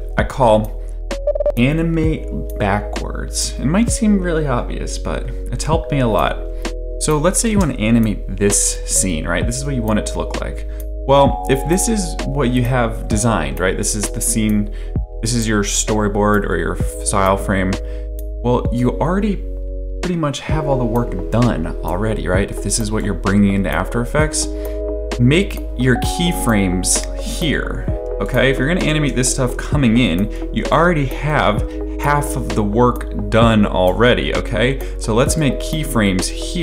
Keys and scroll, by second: 7.5 space, 29.5 p.